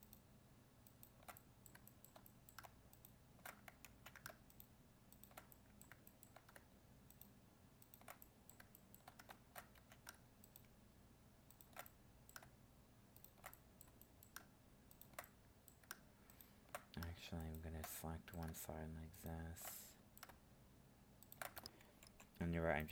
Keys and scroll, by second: 3.8 ctrl+z, 22.0 ctrl+e.